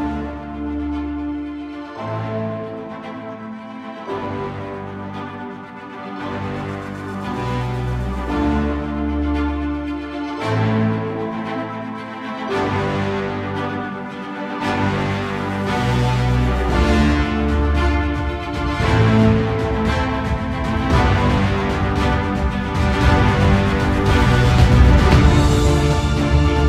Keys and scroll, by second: 5.6 ctrl+-, 13.1 ctrl+alt+=, 25.2 ctrl+alt+=, 26.2 ctrl+0.